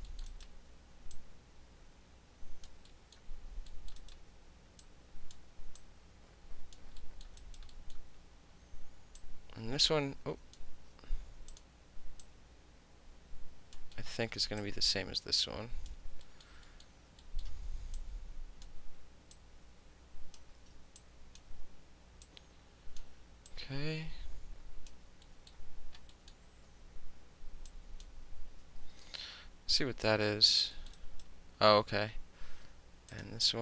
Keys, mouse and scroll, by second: 0.1 alt+middle click, 0.3 alt+right click, 1.2-2.7 drag, 2.9 alt+middle click, 3.7 alt+middle click, 4.0 alt+right click, 4.8-5.4 drag, 5.8 click, 7.0 alt+middle click, 7.4 alt+right click, 7.7 alt+middle click, 9.2-10.6 drag, 10.6 ctrl+z, 11.5 click, 12.2-13.8 drag, 14.0 alt+middle click, 14.6-15.9 drag, 15.9-16.3 alt+middle drag, 16.4 alt+middle drag, 16.8-17.2 alt+middle drag, 17.4-18.0 alt+middle drag, 18.0-18.7 drag, 18.7-19.4 middle drag, 19.4-20.4 drag, 20.4-21.0 ctrl+middle drag, 20.5 ctrl+z, 21.0-21.4 drag, 21.4-22.3 middle drag, 22.3-23.0 drag, 23.0 middle click, 23.5-24.9 drag, 24.9-25.3 alt+middle drag, 25.5 alt+middle click, 26.1 alt+middle click, 27.7 click, 28.9 space, 30.8 alt+middle click, 31.0 alt+right click, 31.1 alt+click, 33.1 click.